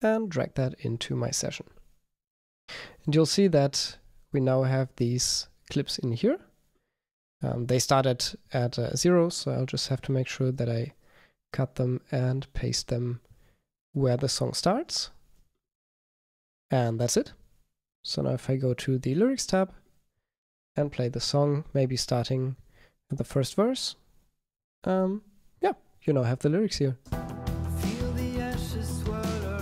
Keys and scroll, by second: 10.5 super+x, 14.8 super+v.